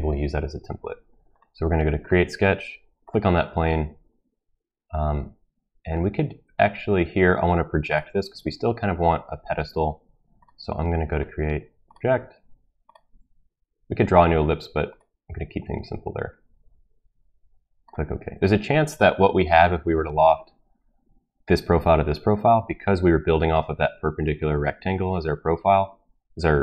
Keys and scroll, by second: 0.6 typing.